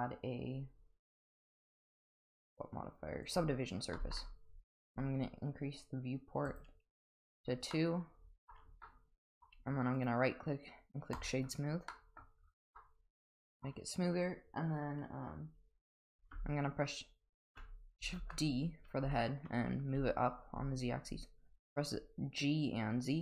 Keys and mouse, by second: 4.0 middle click, 6.5 click, 7.7-8.5 middle drag, 8.8-9.2 middle drag, 9.9 right click, 11.9-12.2 middle drag, 12.8-13.6 middle drag, 18.2 shift+d.